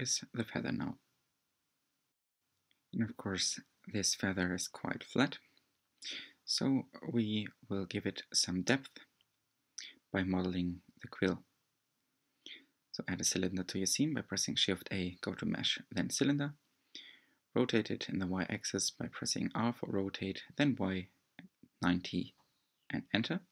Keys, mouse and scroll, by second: 2.3 g, 4.4-6.8 drag, 9.5-9.8 drag, 10.1-12.1 scroll up 14, 12.1-14.5 middle drag, 14.5-14.8 scroll up 9, 15.1 click, 15.6 shift+a, 22.6 r.